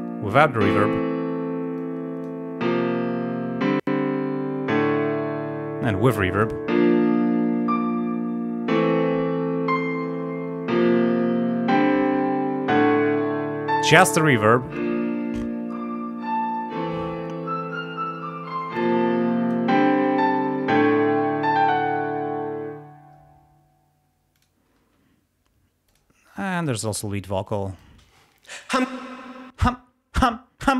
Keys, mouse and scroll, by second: 0.0 click, 1.8 click, 6.4 click, 14.5 click, 18.8 click, 24.4 click, 24.8 space, 25.9 click, 26.6 click, 27.5 click, 28.0 space, 28.9 space.